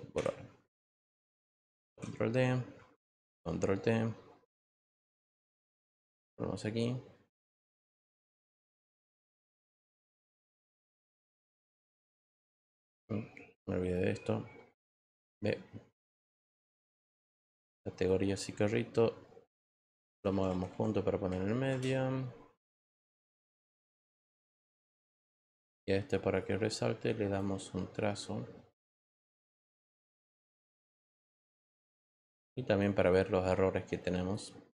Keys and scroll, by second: 1.8 ctrl+d, 12.7 e, 14.9 v, 21.7 Return.